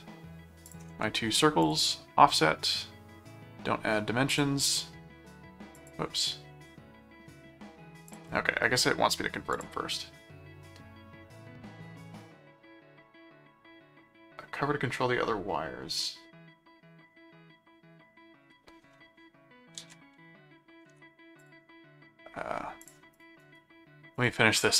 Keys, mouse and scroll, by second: 0.6 ctrl+click, 1.6 click, 4.3 click, 5.8 click, 8.0 click, 9.5 click, 19.9 ctrl+a, 20.9 alt+c, 21.4 click, 22.8 click, 23.4 right click, 24.1 click.